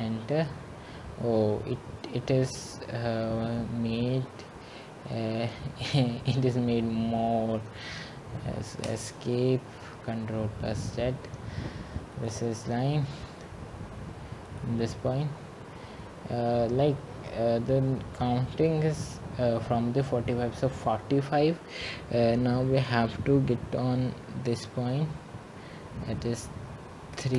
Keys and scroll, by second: 9.2 Return, 10.7 Escape.